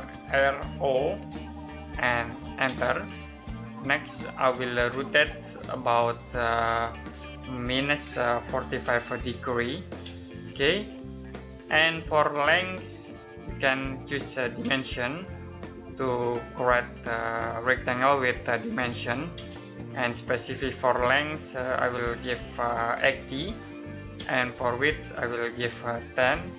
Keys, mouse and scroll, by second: 0.0-0.8 typing, 2.5 space, 8.2-9.9 typing, 14.5 d, 19.2 space, 22.9-24.0 typing, 25.4-26.5 typing.